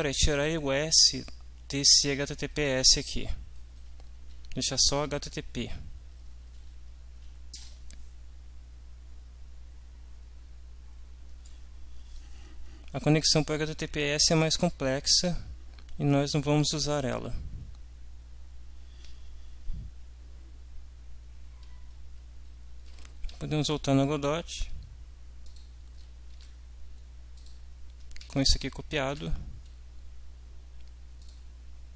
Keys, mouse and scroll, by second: 6.1 Right, 7.6 shift+Return, 23.4 alt+Tab, 25.4 click, 26.6 alt+Tab, 27.4 ctrl+click, 28.2 ctrl+c, 29.1 alt+Tab, 31.2 click.